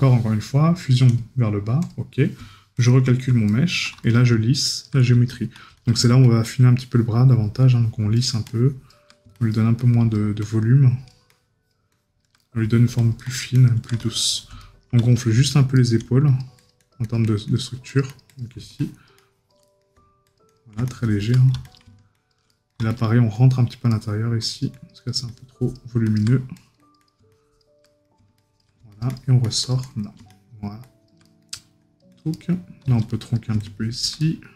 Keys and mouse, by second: 3.5 right click, 12.4 right click, 14.6 right click, 19.6 right click, 21.3 right click, 23.9 right click, 27.8 right click, 31.2 right click, 34.2 right click.